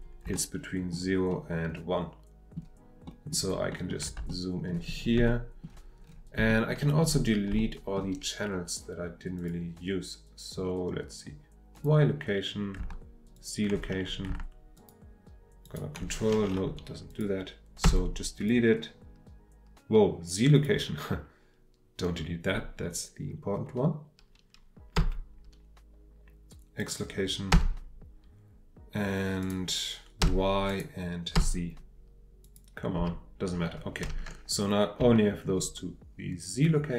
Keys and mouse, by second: 0.4 ctrl+middle click, 1.3-4.1 ctrl+middle drag, 4.2-5.2 shift+middle drag, 5.3 shift+middle click, 6.6 shift+middle click, 7.6 shift+middle click, 9.4 click, 11.7 click, 13.3 ctrl+click, 15.7 ctrl+click, 17.1 click, 17.8 Delete, 18.3 click, 20.5 click, 25.0 Delete, 26.8 click, 27.5 Delete, 29.4 click, 30.2 Delete, 30.7 click, 31.3 Delete, 32.4 click, 33.0 Delete, 35.2 middle click.